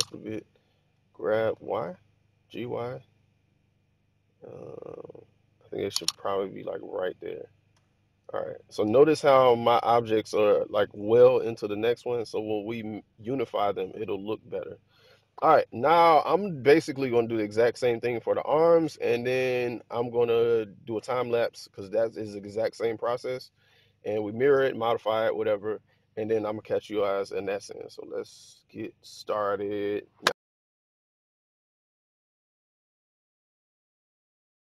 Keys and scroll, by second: 1.1 g, 1.4 y, 7.6 1, 30.2-34.7 typing.